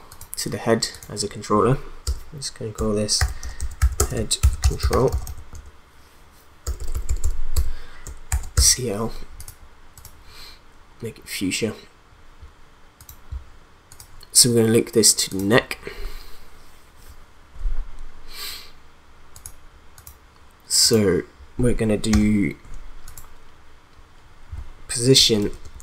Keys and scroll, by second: 2.0 Return, 2.9-6.7 typing, 8.3 shift+l, 8.6 Return, 22.1 p, 25.4 shift+a.